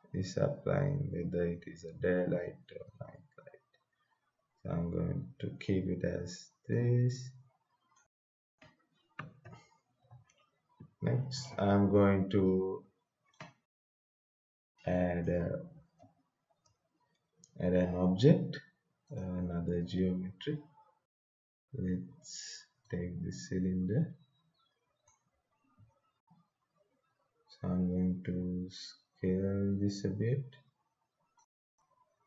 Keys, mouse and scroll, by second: 6.8-8.4 drag, 8.4 right click, 9.2-13.2 typing, 14.9 click, 16.0 Scroll_Lock, 16.5 BackSpace, 19.1 click, 22.8-26.2 drag, 26.2-27.9 scroll down 1, 30.4-31.4 scroll down 1, 31.4-32.2 drag.